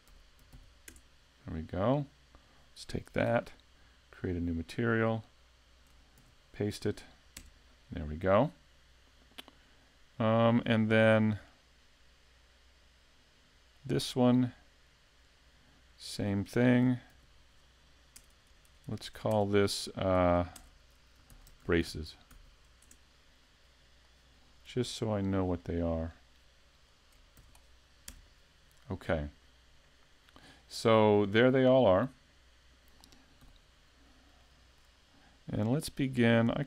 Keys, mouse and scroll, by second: 2.4 click, 4.7 click, 5.5 click, 11.5 click, 12.3-12.6 scroll down 3, 13.8 click, 15.3 right click, 16.1 click, 18.3 BackSpace, 18.6 BackSpace, 18.9 BackSpace, 19.3 BackSpace, 24.1 click, 26.1 click, 26.9 click, 33.4 n, 34.4 shift+middle click, 34.9 scroll up 2, 36.4 click.